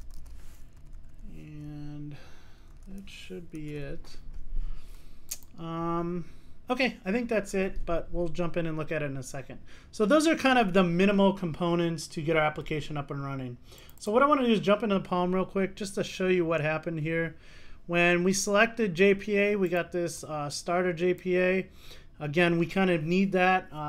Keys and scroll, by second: 3.7 super+s.